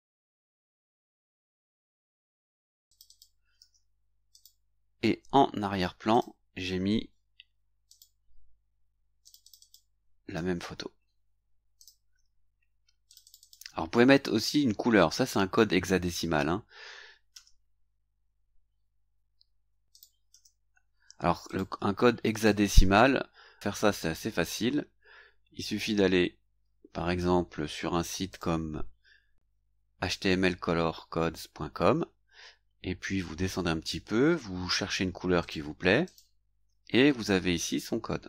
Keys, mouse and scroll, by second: 1.1-2.5 drag, 2.9 click, 3.5 ctrl+v, 4.3 click, 6.1 click, 7.9 click, 9.2 ctrl+click, 10.3 ctrl+c, 11.8 click, 13.0 click, 17.3 ctrl+v, 19.9 ctrl+click, 20.3 ctrl+v, 21.5 click, 22.3 click, 33.1-33.4 scroll up 2, 33.5-34.4 scroll down 2, 35.4 click, 36.0 click, 36.8 scroll up 1.